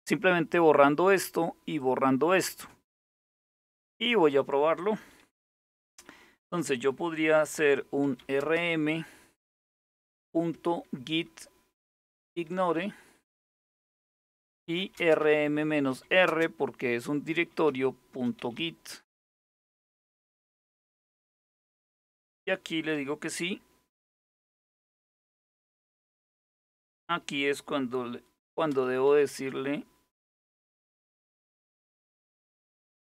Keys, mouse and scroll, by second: 1.4 click, 2.7 scroll down 1, 3.7-7.7 scroll down 1, 7.4-10.3 typing, 11.3-12.1 typing, 12.1 Tab, 13.1 Return, 14.0-15.9 typing, 17.3-18.9 typing, 23.6 s, 24.0 Return, 25.6 s, 25.8 Return, 28.1 n, 28.3 Return, 30.0 n, 30.2 Return, 31.1-33.0 typing.